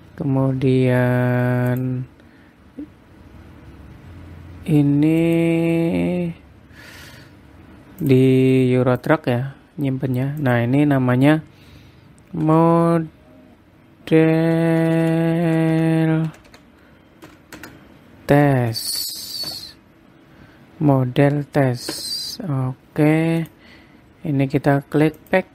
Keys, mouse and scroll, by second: 0.7-2.3 scroll down 5, 2.3 click, 2.3 scroll down 1, 8.6 click, 11.0 click, 15.3 BackSpace, 15.5 BackSpace, 24.0 click.